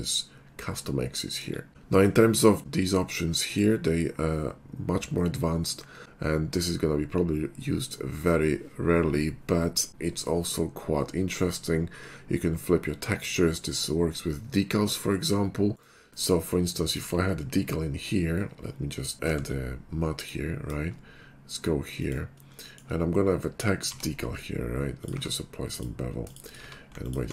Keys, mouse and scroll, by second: 1.2 middle click, 3.5 click, 15.7 right click, 16.0 middle click, 16.8 click, 19.2 alt+m, 20.2 click, 22.0 click, 23.9 d, 25.0 click, 25.2 q, 25.7 click, 26.3 click, 26.6 q, 27.0 alt+click.